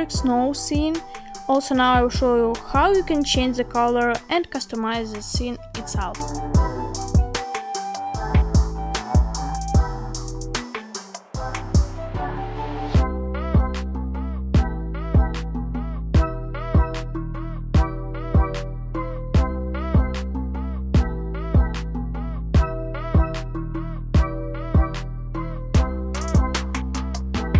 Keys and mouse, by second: 6.0-6.5 drag, 7.1 g, 12.5 click, 13.2 g, 14.2 click, 15.2 g, 19.6 click, 21.0 click, 22.0-26.1 drag, 26.7-27.5 drag.